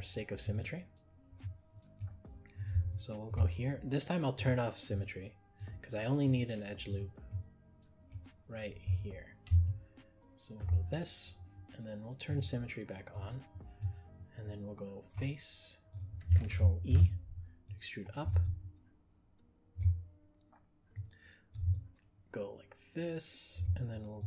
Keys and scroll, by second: 16.9 ctrl+e.